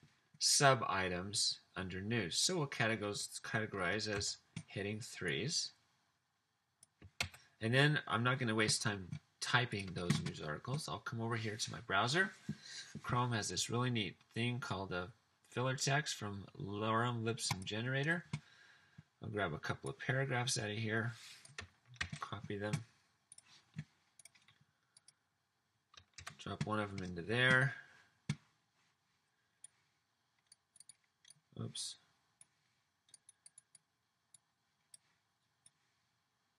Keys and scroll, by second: 4.1 super+3, 7.1 super+3, 22.1 super+c, 26.2 super+v.